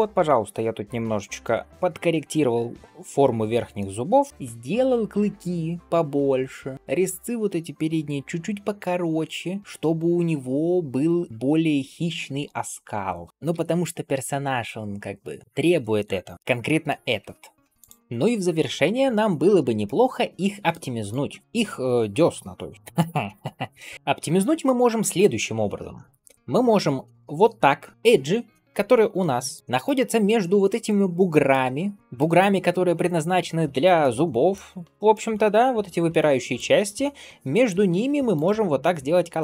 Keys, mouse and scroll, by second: 0.2-0.6 scroll up 2, 0.6-1.7 middle drag, 1.7-2.2 scroll down 2, 3.6-4.0 middle drag, 4.2 shift+middle click, 4.3-4.7 scroll up 1, 6.7-9.6 drag, 13.3 click, 13.6 ctrl+s, 16.1-16.5 scroll down 2, 16.3 click, 16.5 middle click, 16.8-17.2 scroll up 2, 17.1 Tab, 17.6 click, 19.0 shift+middle click, 19.7 middle click, 20.9 click, 22.8 shift+middle click, 23.9 shift+middle click, 23.9 scroll up 1, 24.2 shift+middle click, 24.8 scroll up 1, 26.3 click, 27.9 middle click, 29.4 ctrl+alt+click, 30.7 middle click, 32.0 middle click, 33.3-33.9 scroll up 2, 33.9 middle click, 34.7-35.1 scroll down 2, 35.0-36.4 middle drag, 36.6-37.3 scroll up 1, 37.5 m.